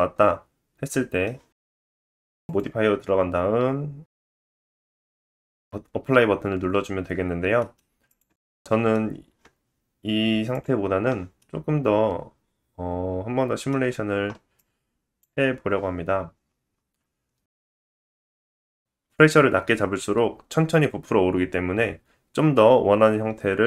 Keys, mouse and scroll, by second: 2.4 middle click, 2.5-5.1 drag, 5.3-8.1 middle drag, 8.1-10.4 drag, 10.4 middle click, 10.5-14.5 drag, 11.3 middle click, 14.5-16.1 middle drag, 16.1-17.2 scroll down 7, 17.6-18.2 scroll down 2, 18.2 click.